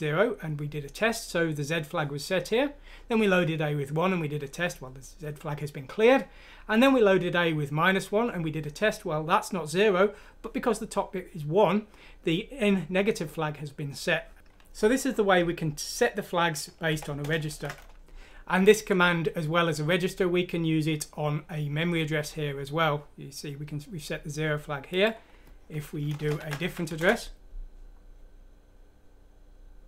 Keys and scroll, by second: 16.9-17.5 typing, 26.1 BackSpace, 26.8 F6, 26.9 Return.